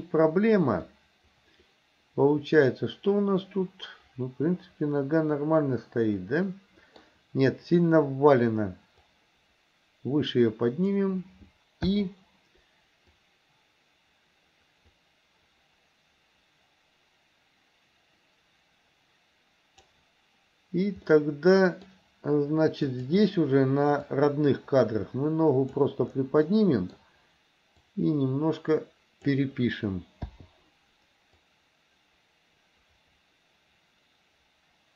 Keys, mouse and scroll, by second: 0.9-7.0 middle drag, 9.2-11.0 drag, 12.0 i, 13.2-20.0 drag, 21.1 middle click, 22.9 click, 24.0 click, 24.5-25.9 drag, 26.5 middle click, 27.8 click, 28.0-29.4 drag, 30.3 i, 31.5-34.9 drag.